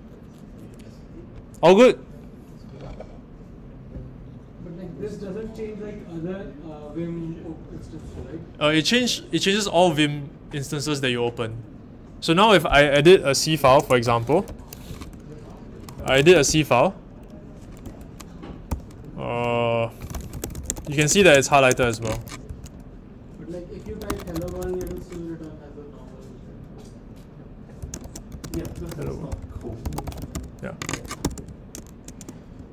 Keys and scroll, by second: 13.4-16.9 typing, 17.8 Return, 18.7 typing, 20.0-25.3 typing, 27.5-31.3 typing, 31.2 Escape.